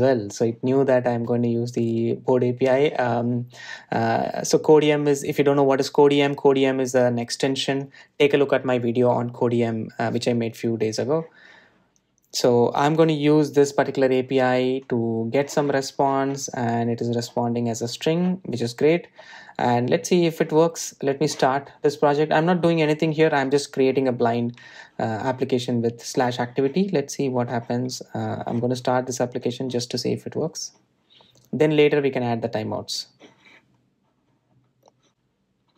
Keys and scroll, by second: 23.4 shift+super+i, 31.5 super+F8.